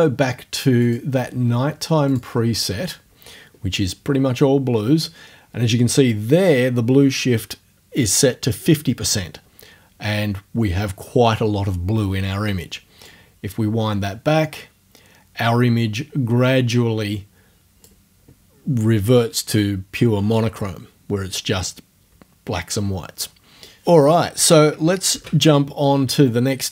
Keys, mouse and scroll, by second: 0.9 click, 1.2-2.2 middle drag, 2.2 click, 2.4-2.7 scroll up 1, 2.7 click, 4.2 click, 5.7-7.3 drag, 13.1-18.0 drag, 18.0-20.6 scroll up 1, 20.6-21.0 scroll up 1, 21.0-22.0 middle drag, 23.7 click, 25.1 ctrl+f.